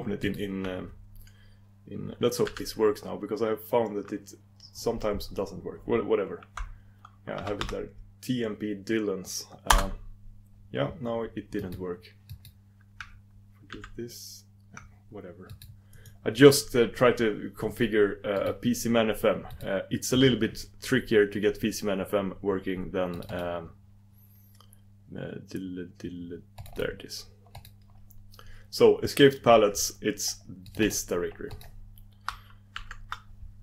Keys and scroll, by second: 3.0 alt+e, 9.9 alt+e, 11.6 alt+e, 12.3 alt+e, 13.7 super+e, 13.9 super+e, 15.5 super+e, 16.1 super+e, 18.4 super+e.